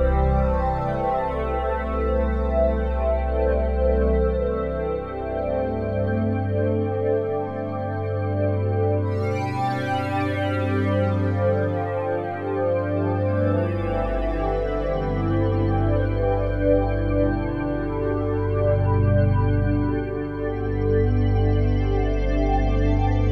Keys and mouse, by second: 0.7 click, 1.7 ctrl+s, 2.5 click, 4.5 click, 5.7-6.8 ctrl+alt+drag, 6.8 ctrl+alt+middle click, 7.0-9.6 drag, 9.8 ctrl+alt+click, 10.5 alt+shift+click, 11.7 click, 12.6-14.0 drag, 14.3-15.4 drag, 15.6-19.4 typing, 19.3 click, 20.3 click, 20.5 click, 21.2-22.8 typing.